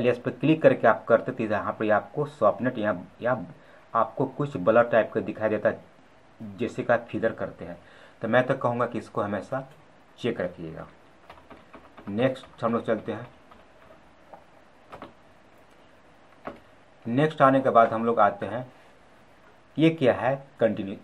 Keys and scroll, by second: 14.8 ctrl+z.